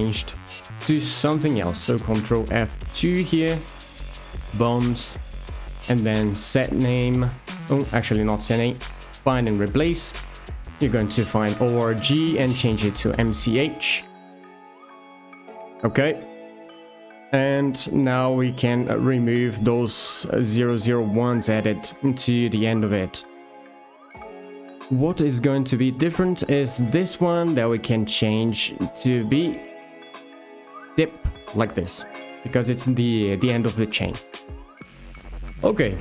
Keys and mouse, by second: 1.8 ctrl+F2, 16.4 ctrl+F2, 20.1 0, 21.5 Return, 25.7 click, 26.1 shift+middle click, 26.7 F2, 28.8 BackSpace, 29.0 BackSpace, 34.8 shift+middle click.